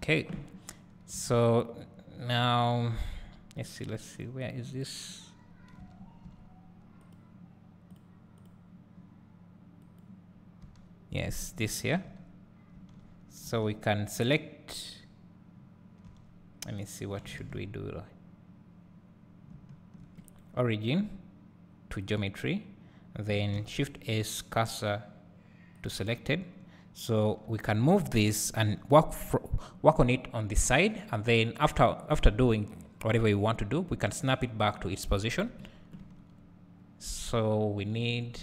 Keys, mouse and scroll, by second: 5.8 Tab, 6.4 Tab, 7.1 click, 8.0 click, 10.0 click, 11.3 Tab, 11.6 Tab, 13.4 a, 22.0 click, 25.8-28.4 right drag, 25.8 shift+s, 27.4 g, 28.4-36.0 drag, 36.0 Tab, 36.4 scroll up 1, 38.1-38.4 scroll down 1.